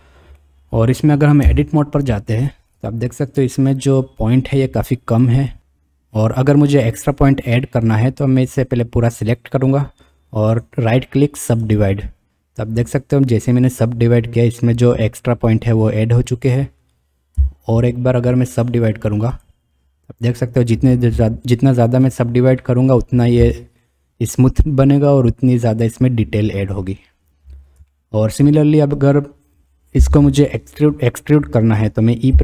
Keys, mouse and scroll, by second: 0.4-0.8 middle drag, 0.8-1.2 drag, 1.4 Tab, 2.4 shift+right click, 3.9 click, 5.0 click, 5.6 a, 10.6-11.8 drag, 14.3 click, 15.0 click, 16.0 click, 17.4 a, 18.6-19.5 drag, 22.7 click, 23.8 click, 25.3 click, 27.9 shift+click, 29.2 click, 32.3 e.